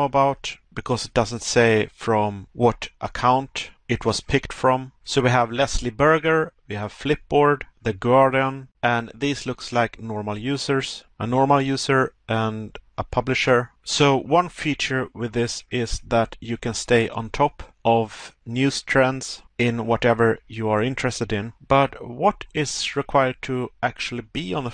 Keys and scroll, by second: 17.5 Pause, 19.4 Pause, 21.5 Pause.